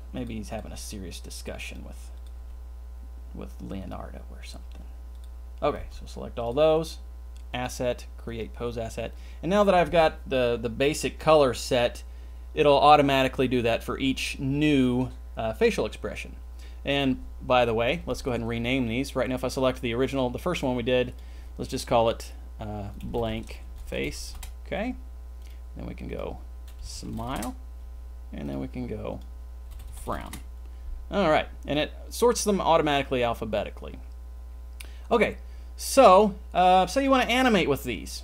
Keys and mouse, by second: 0.7 g, 2.5 g, 4.7 g, 5.8 c, 7.7-8.6 drag, 18.0 click, 21.0-24.3 drag, 25.4 click, 26.0-27.3 drag, 29.2-30.2 drag, 37.7 click.